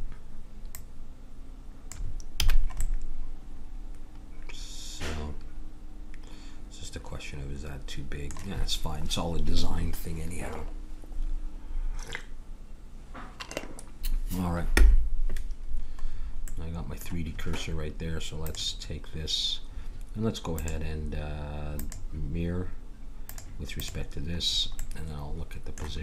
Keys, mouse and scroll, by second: 2.4 a, 16.5 middle click, 18.5-20.3 drag, 20.5-22.4 drag, 23.2-25.2 drag.